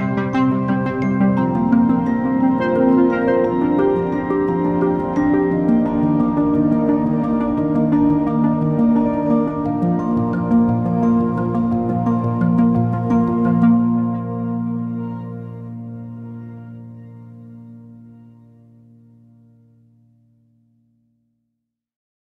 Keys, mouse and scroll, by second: 0.2 ctrl+-, 0.8 ctrl+0, 1.3 ctrl+-, 1.9 ctrl+0, 2.2 ctrl+0, 3.3 ctrl+=, 3.7 ctrl+=, 4.1 ctrl+-, 4.3 ctrl+-, 4.8 ctrl+=, 5.2 ctrl+-, 5.6 ctrl+=, 6.8 ctrl+=, 7.2 ctrl+-, 7.6 ctrl+=, 7.9 ctrl+-, 8.2 ctrl+=, 8.6 ctrl+-, 8.8 ctrl+-, 9.2 ctrl+=, 9.4 ctrl+=, 10.4 ctrl+-, 10.6 ctrl+-, 10.8 ctrl+-, 12.7 ctrl+=, 12.8 ctrl+=, 13.8 ctrl+-, 13.9 ctrl+-.